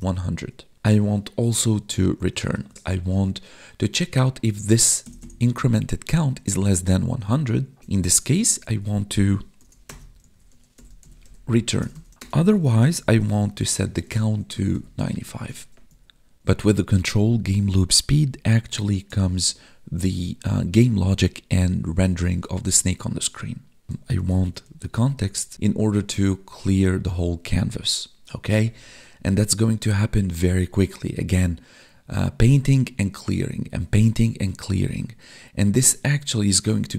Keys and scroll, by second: 2.6 ctrl+Left, 7.8 Right, 8.7 Right, 13.4 space, 13.7 space, 15.3 ctrl+s, 15.8 Up, 18.0 Down, 18.3 Tab.